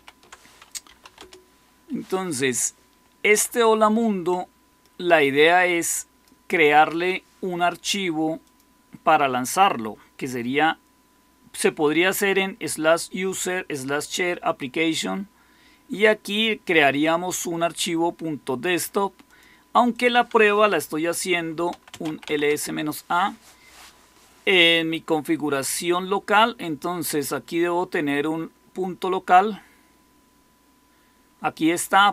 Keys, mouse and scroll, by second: 0.5-1.4 typing, 21.1-22.7 typing, 32.0-32.1 drag.